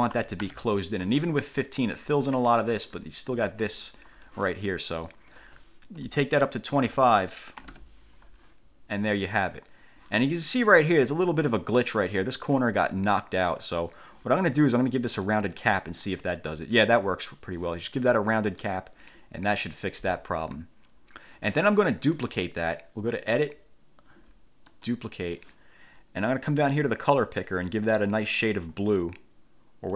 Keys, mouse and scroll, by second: 0.3 1, 0.6 5, 0.7 Return, 5.2 click, 7.0 2, 7.8 5, 15.4 click, 18.8 click, 23.4 click, 24.9 click, 26.6-29.0 drag.